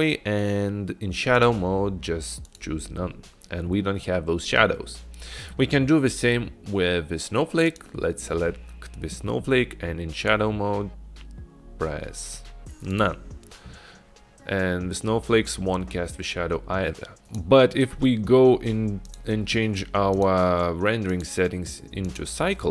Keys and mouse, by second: 1.5-2.6 drag, 7.7 click, 10.3-13.1 drag, 17.3 drag, 20.2 click, 21.2-22.7 drag.